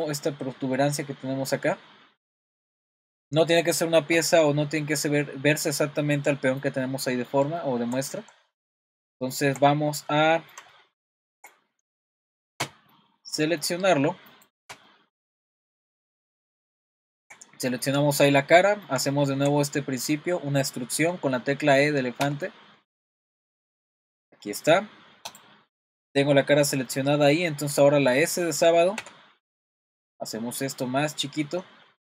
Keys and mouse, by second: 4.9-14.4 middle drag, 14.4 click, 14.9 shift+middle click, 16.2 middle click, 16.9 shift+middle click, 17.8 middle click, 18.3 middle click, 18.6 middle click, 19.1 shift+middle click, 22.2 e, 26.9 middle click, 29.0 s.